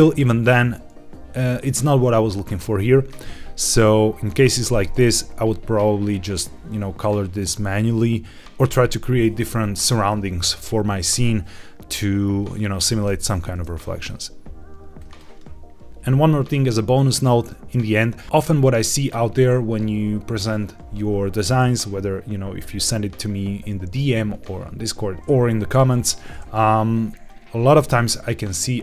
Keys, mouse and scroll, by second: 3.6 click, 8.4 click, 14.0-14.4 drag, 14.9 click.